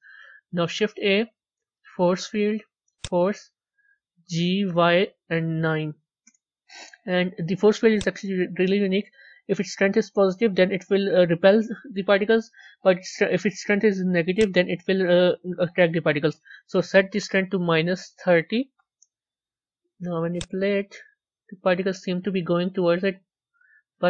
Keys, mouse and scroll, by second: 2.9 shift+a, 4.4 g, 20.3 click, 21.9 scroll up 4, 22.8 scroll down 3.